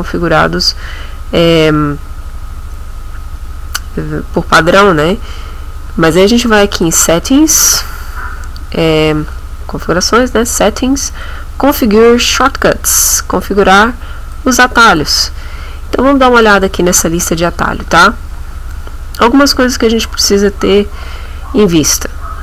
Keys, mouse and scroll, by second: 6.8 click, 12.4 click, 14.3 click.